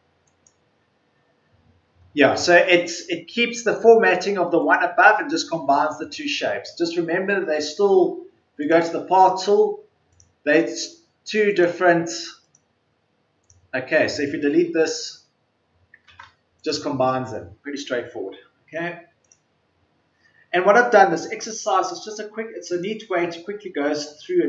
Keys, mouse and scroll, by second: 14.6 Delete, 16.0 ctrl+z.